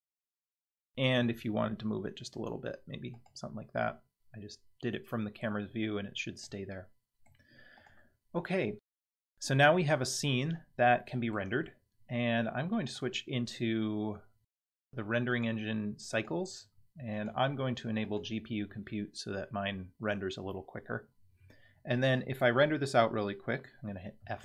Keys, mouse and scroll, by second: 1.2 g, 4.9-5.4 middle drag, 5.6 scroll down 3, 6.4-7.3 middle drag, 7.7 click, 10.0-11.3 middle drag, 12.9 click, 15.3-16.2 drag, 17.1-18.2 drag.